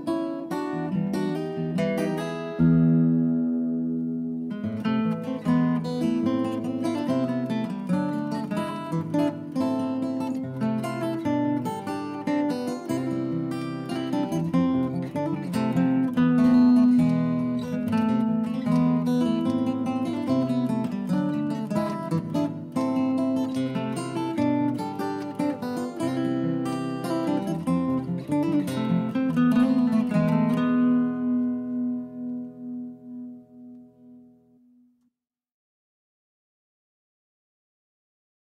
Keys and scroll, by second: 0.0 Right, 0.2 Right, 0.4 Right, 0.8 Right, 5.5 Down, 5.6 Return, 7.0 shift+Left, 8.1 Delete, 14.6 Down, 14.7 Return, 20.3 Delete, 20.7 Down, 20.8 Return, 26.7 Down, 26.8 Return, 33.1 Down, 33.2 Return, 34.0 shift+Left, 35.4 Down, 35.5 Return, 36.2 shift+Left.